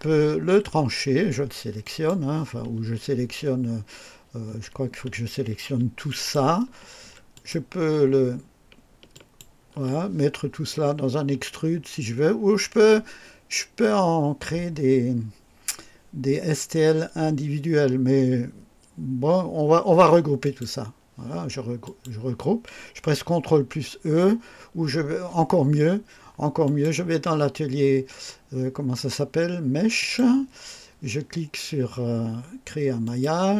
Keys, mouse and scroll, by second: 0.4 scroll down 1, 1.7 click, 6.0 shift+click, 7.2 ctrl+click, 9.0 shift+click, 20.3 click, 21.7 click, 26.5 click, 29.9 click, 32.9 click.